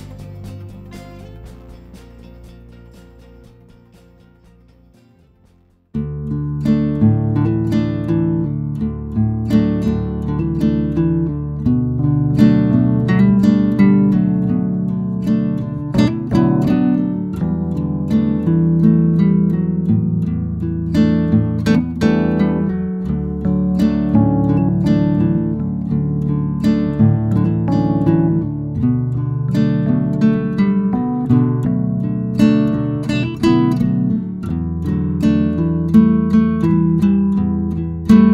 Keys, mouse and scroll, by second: 0.3 KP_1, 2.1 shift+middle click, 2.2 shift+scroll up 2, 2.4 g, 3.8 Tab, 4.3 ctrl+2, 5.0 ctrl+z, 5.3 middle click, 5.5 scroll down 1, 5.7 shift+middle click, 6.0 Tab, 6.3 middle click, 6.7 3, 6.8 click, 7.1 click, 7.3 g, 8.0 Tab, 8.8-9.8 drag, 9.8 KP_0, 10.1 click, 12.5 scroll up 1, 12.7-13.2 shift+middle drag, 13.2-13.8 scroll up 1, 13.8 click, 14.0 Tab, 14.5 ctrl+r, 15.7 3, 15.9 click, 16.2 shift+d, 16.5 p, 16.9 Tab, 17.1 click, 17.5 s, 17.9-18.9 right drag, 18.9 s, 19.3 Tab, 19.6 a, 19.7 e, 20.6 Tab, 20.8 g, 22.0 Tab, 22.2 g, 23.2 Tab, 23.8 g, 25.5 Tab, 26.3 ctrl+r, 29.0 Delete, 29.7 shift+middle drag, 29.8 a, 30.0 f, 30.2 Tab, 30.6 click, 32.2 shift+right click, 32.5 shift+a, 34.5-35.1 scroll down 2, 35.1 click, 35.4-35.9 shift+middle drag, 35.9 scroll down 2, 36.1 g, 37.1 s, 37.3 Tab, 37.8 3, 38.0 shift+z, 38.2 click.